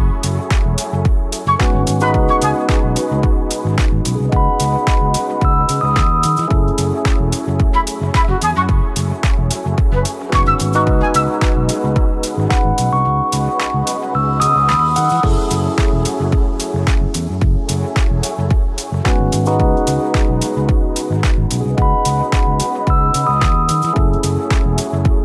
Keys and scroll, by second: 1.8 ctrl+z, 6.6 Caps_Lock, 7.2 typing, 9.9 ctrl+z, 11.5 ctrl+z, 12.0 v, 13.7 b, 15.6 ctrl+z, 16.5-17.7 typing, 18.8-21.6 typing, 24.1 t.